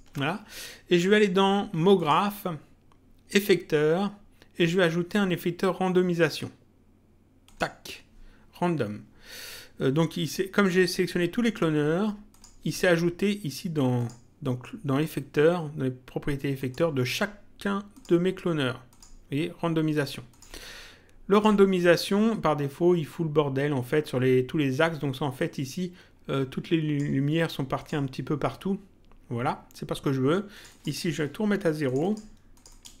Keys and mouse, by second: 1.9 click, 7.4 click, 12.3 click, 13.9 click, 16.5 click, 17.9 click, 20.3 click, 25.4 click, 27.7 click, 30.5 click, 31.8 click.